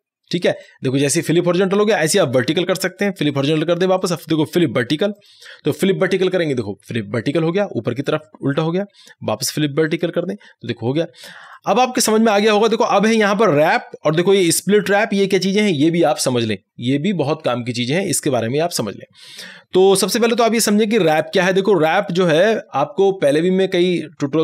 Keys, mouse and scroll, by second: 2.1 right click, 3.4 click, 4.1 right click, 5.2 click, 8.6 click, 8.6 right click, 9.9 click, 11.5 right click.